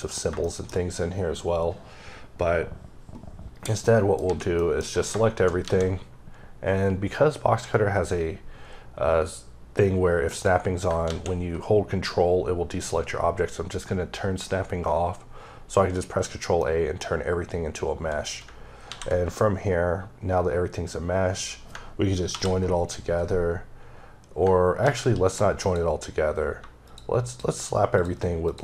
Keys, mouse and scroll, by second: 0.5 shift+double middle click, 3.9 middle click, 4.3 a, 4.6 middle click, 5.7 a, 10.3 click, 11.1 a, 16.0 click, 17.1-18.0 scroll up 3, 18.9 ctrl+a, 21.1-21.7 scroll down 2, 22.3 ctrl+j, 25.7 click, 27.3 shift+double click, 28.0 shift+click, 28.5 shift+click.